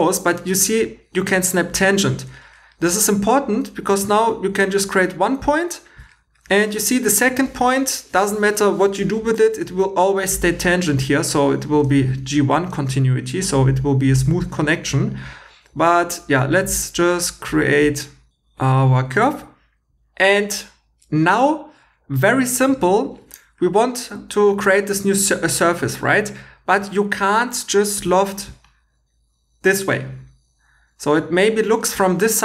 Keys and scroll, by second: 23.1 2, 28.0 i.